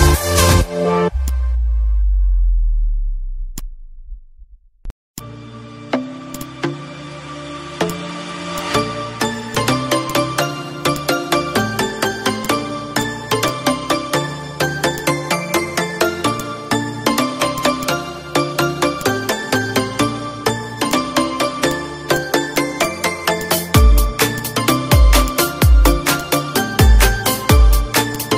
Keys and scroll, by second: 2.7 F1, 5.4 ctrl+shift+v, 6.1 ctrl+shift+c, 6.9 F2, 16.2 ctrl+d, 20.2 ctrl+k, 26.8 -, 27.4 space, 27.8 z.